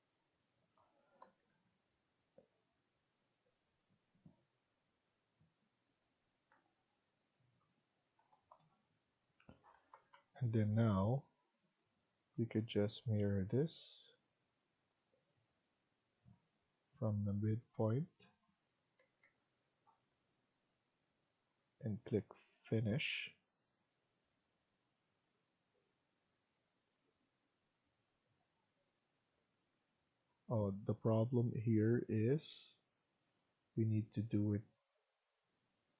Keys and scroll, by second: 1.2 Escape, 1.4 Escape, 6.5 Down, 7.0 Down, 8.2 Down, 9.9 Escape, 10.0 Escape, 18.9 Escape, 19.2 Escape, 28.2 Escape, 28.4 Escape.